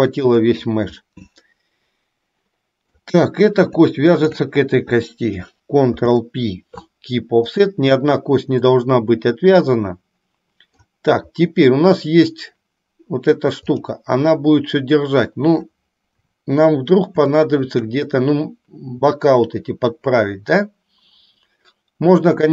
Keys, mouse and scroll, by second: 1.2-3.1 middle drag, 3.1 scroll down 1, 4.3 shift+click, 6.1 ctrl+p, 8.9-11.1 middle drag, 16.2 KP_7, 17.4 shift+middle click.